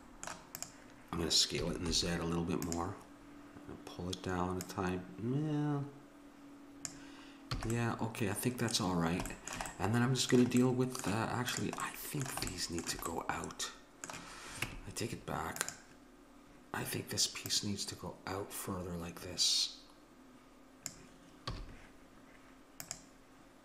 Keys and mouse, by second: 0.6-2.3 drag, 1.6 s, 4.7-6.4 drag, 7.6 a, 7.8 middle click, 10.1-11.1 middle drag, 11.5-13.2 drag, 14.6 Tab, 17.5-19.2 drag, 21.5 a.